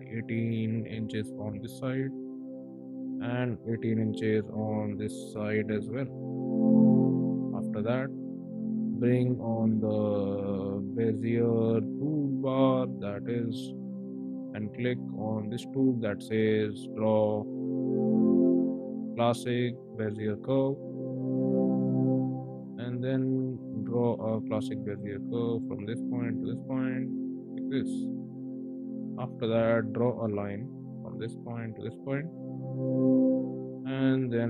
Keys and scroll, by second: 0.7 Return, 1.3 space, 2.8 m, 4.7 1, 5.1 8, 5.5 Return, 5.8 space, 8.6 ctrl+`, 9.5 b, 29.6 l, 33.0 space, 33.7 q.